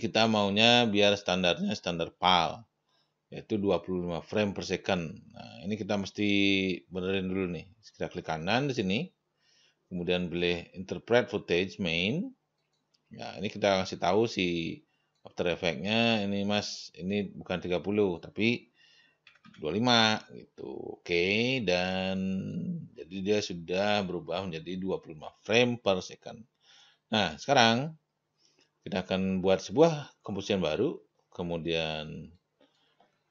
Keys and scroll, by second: 19.5-20.4 typing.